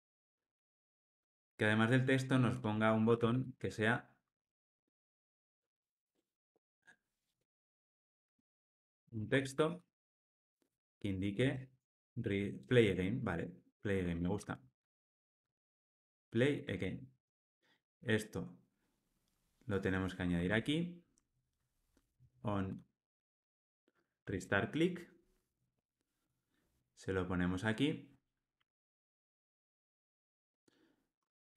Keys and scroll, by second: 0.8 alt+Return, 10.7 Return, 16.0 Tab, 16.7 Tab, 17.1 ctrl+alt+o, 22.7 Escape, 24.2 Tab.